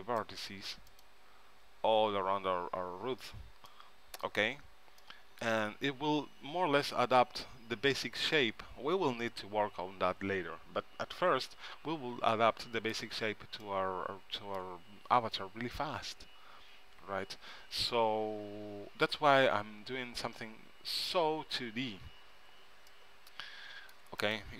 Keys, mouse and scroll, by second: 0.3-2.1 drag, 3.8-6.9 middle drag, 12.4-15.4 middle drag, 18.8 KP_3, 22.5 c.